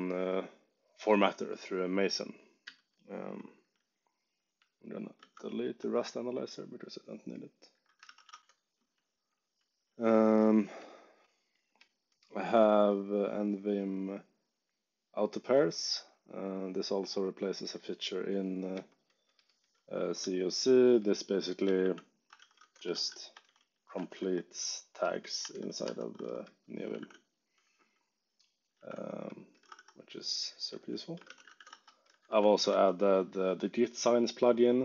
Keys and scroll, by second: 2.6 j, 5.1 shift+x, 7.7-8.9 typing, 11.7 k, 12.3 j, 18.7 k, 20.1 h, 21.6 z, 22.2 Escape, 22.3 o, 22.5 Return, 22.9 alt+shift+8, 23.3 Escape, 23.4 o, 23.9 alt+8, 24.1 Escape, 25.2-27.4 typing, 27.5 Escape, 28.5-32.5 typing, 29.6 Escape, 32.6 Escape.